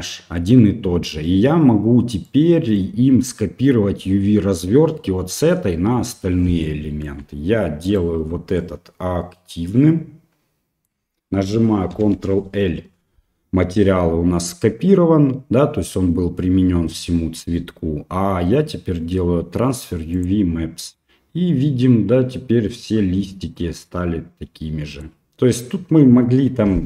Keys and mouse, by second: 2.3 middle click, 6.7 middle click, 7.9 shift+right click, 8.6-10.8 middle drag, 11.9 ctrl+l, 21.0-23.3 middle drag, 23.6-25.0 middle drag.